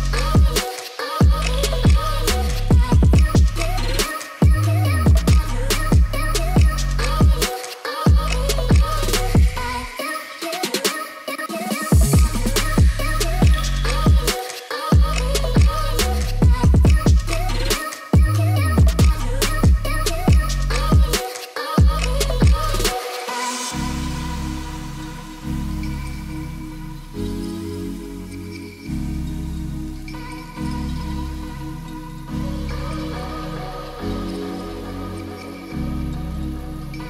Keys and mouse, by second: 0.8 click, 1.3-1.8 drag, 1.8 s, 2.2 click, 4.2 ctrl+p, 6.3 click, 8.5 ctrl+p, 11.8-12.1 drag, 12.1 middle drag, 12.5 space, 12.8 middle drag, 13.8 click, 14.3-15.8 drag, 16.7 space, 17.2 ctrl+s, 17.5 click, 18.3-19.5 drag, 19.0 0, 20.8-21.7 drag, 22.9-23.3 middle drag, 23.5 middle drag, 24.4-24.8 middle drag, 25.0 shift+middle click, 25.2-25.5 middle drag, 25.9 ctrl+s, 26.7 middle click, 27.3 middle click, 27.8 KP_1, 28.6 click, 29.5 g, 29.7 z, 30.7 ctrl+click, 31.0 middle drag, 31.5 ctrl+s, 31.8 click, 32.1 middle drag, 32.5 shift+a, 34.6-35.0 middle drag, 35.2 s, 36.2 1, 36.2 0, 36.9 Return.